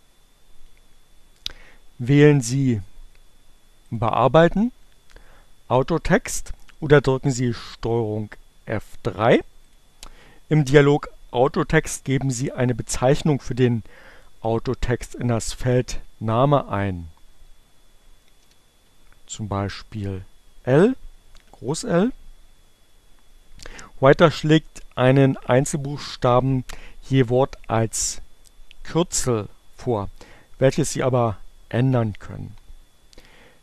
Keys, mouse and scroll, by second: 3.4 click, 9.1 click, 18.0 shift+l.